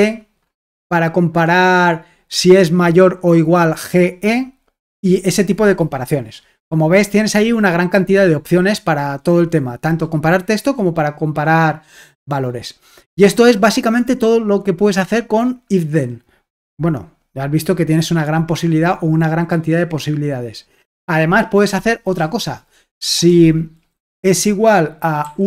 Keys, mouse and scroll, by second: 0.0-2.7 scroll up 1, 6.6-7.8 scroll down 1, 7.8-10.3 scroll down 1, 15.8-17.6 scroll down 1, 23.1 Escape, 25.2-25.4 typing.